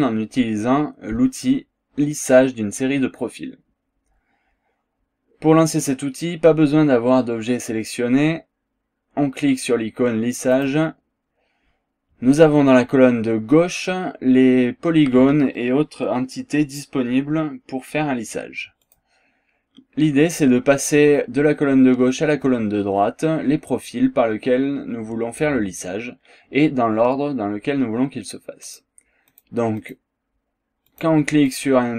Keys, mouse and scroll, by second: 10.5 click, 18.8 click, 28.6 click, 29.3 click, 29.8 click, 30.9 click, 31.5 click.